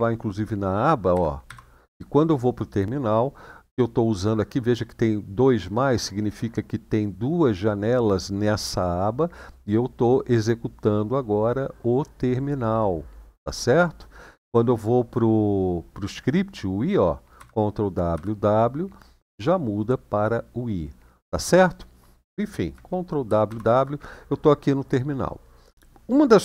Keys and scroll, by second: 0.9 ctrl+w, 1.2 ctrl+w, 17.1 ctrl+w, 17.9 w, 23.0 ctrl+w, 23.2 ctrl+w.